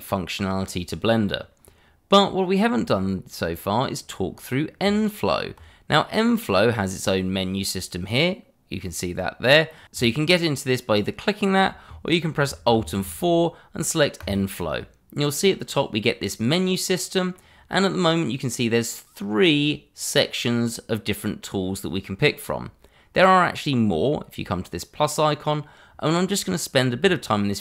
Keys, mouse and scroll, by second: 4.8 Tab, 12.8 alt+4, 14.2 click, 15.4 middle click, 23.1 click.